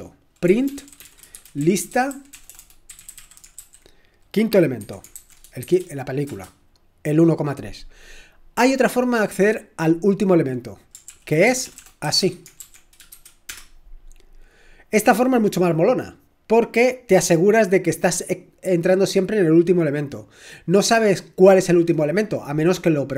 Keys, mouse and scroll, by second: 1.0-3.6 typing, 4.8-5.6 typing, 6.3 Return, 11.1 ctrl+p, 11.5-13.1 typing, 13.5 Return.